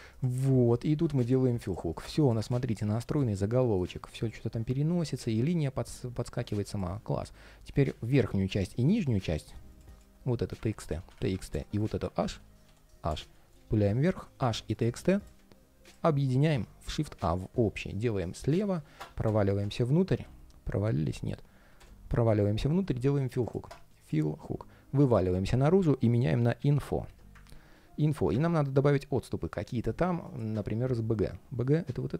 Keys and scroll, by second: 6.9 ctrl+shift+4, 7.8 ctrl+shift+3, 8.8 ctrl+shift+3, 10.4 super+r, 11.9 super+r, 25.3 super+r, 27.2 super+s.